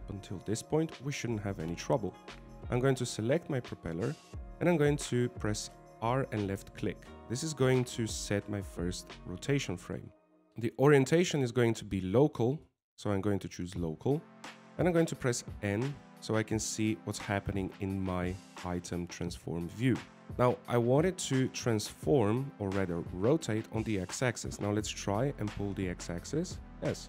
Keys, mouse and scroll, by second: 4.2 right click, 7.9 r, 12.9 click, 16.8 n, 20.3 middle click, 20.3 scroll down 2, 21.5 scroll up 1, 21.8 shift+middle click, 22.1 middle click, 26.3 click.